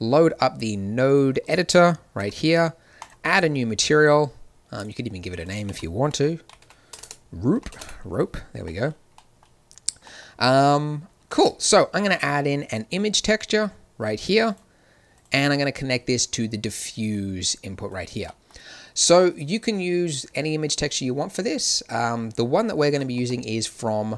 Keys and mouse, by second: 2.1 n, 2.9-4.1 drag, 6.9 BackSpace, 11.2 shift+a, 15.7-16.8 drag, 17.0-18.2 drag, 19.1 click.